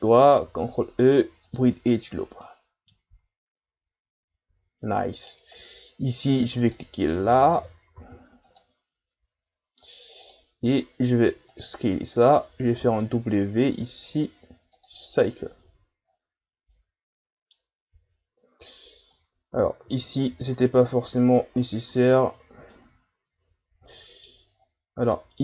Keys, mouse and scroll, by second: 0.4 ctrl+e, 2.2 scroll down 1, 2.4 middle click, 3.1 Tab, 3.9-4.5 ctrl+scroll up 5, 4.5 Tab, 4.8 scroll up 1, 4.8-6.6 middle drag, 6.6-8.0 drag, 8.0 ctrl+r, 10.7 s, 12.8 w, 15.7 Tab, 16.1 scroll down 4, 16.7-17.6 middle drag, 17.6 scroll up 3, 17.9 Tab, 19.5 ctrl+z, 19.9 ctrl+z, 20.4 ctrl+z, 21.0 Tab, 21.5 scroll down 5, 21.9 a, 22.3-22.7 scroll down 3, 22.7-24.6 middle drag, 24.6-25.1 scroll up 6, 25.1 middle click.